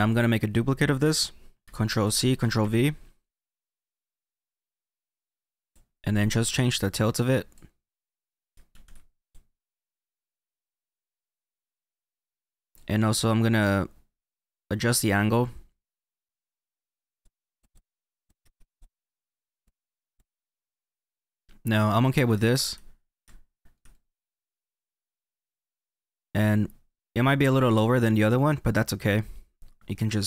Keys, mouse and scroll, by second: 0.0 click, 1.5 ctrl+c, 2.5 ctrl+v, 3.8 click, 6.7 click, 8.6 ctrl+z, 9.1 click, 10.3 click, 16.0 click, 16.8 middle click, 17.2 click, 17.7 click, 18.0 click, 18.3 scroll up 4, 18.4 shift+middle click, 18.8 click, 18.8 middle click, 19.3 click, 20.2 middle click, 20.8-23.2 middle drag, 20.8 scroll down 2, 22.4-23.2 scroll down 2, 23.8-26.8 middle drag, 28.5-30.2 drag.